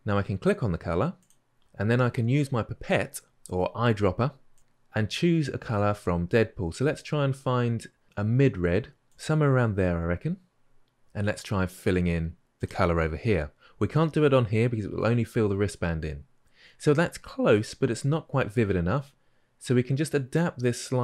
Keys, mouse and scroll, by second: 12.7-21.0 drag.